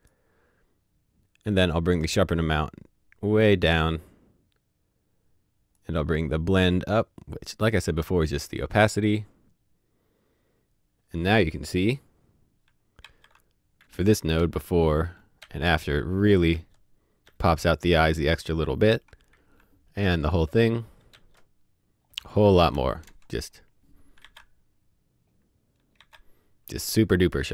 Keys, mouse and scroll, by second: 2.0 click, 10.4-11.8 scroll down 1, 12.6 scroll down 1, 12.9-15.9 typing, 17.2 typing, 19.5-20.0 typing, 22.6 KP_0, 24.7 z, 25.9 typing.